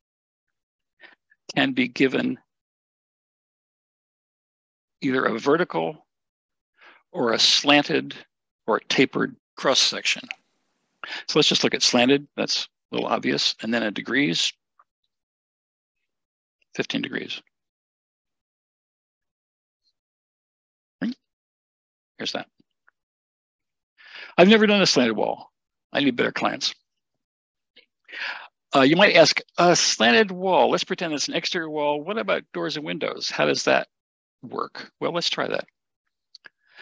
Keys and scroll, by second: 17.0 typing.